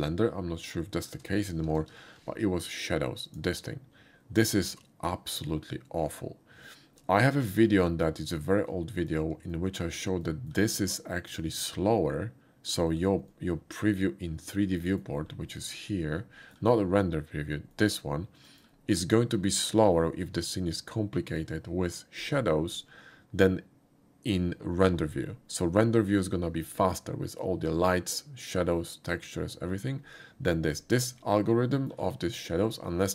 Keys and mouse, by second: 0.9 shift+middle click, 1.8 alt+v, 3.3 click, 7.7-8.0 shift+middle drag, 8.6 shift+middle click, 9.6 shift+middle drag, 10.2 shift+middle click, 13.4-15.0 middle drag, 15.6-16.5 middle drag, 17.7-18.7 middle drag, 31.8 shift+middle click.